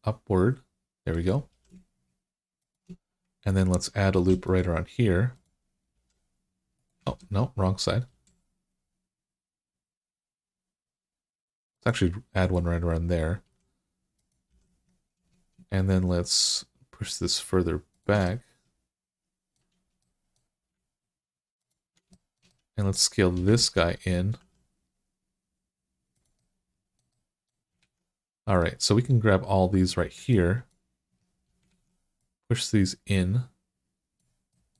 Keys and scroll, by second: 1.3 g, 4.0 ctrl+r, 5.8 g, 6.9 ctrl+z, 8.0 ctrl+r, 13.3 r, 14.3 g, 23.4 alt+z, 24.2 s, 27.6 alt+z, 31.5 alt+z.